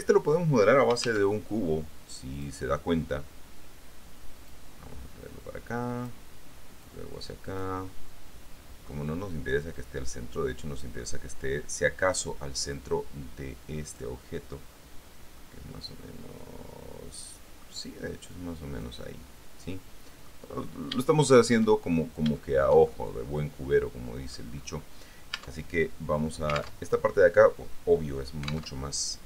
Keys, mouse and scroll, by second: 0.2 alt+Tab, 1.2 shift+a, 2.6 click, 4.7-6.4 drag, 7.0-9.2 drag, 9.9-11.2 drag, 11.2-12.4 middle drag, 12.9-14.4 drag, 15.6-18.0 middle drag, 18.5 click, 20.0 middle click, 20.7-22.0 scroll up 3, 22.6-24.7 shift+drag, 24.7-25.1 scroll down 2, 25.5 Tab, 27.0 alt+Tab.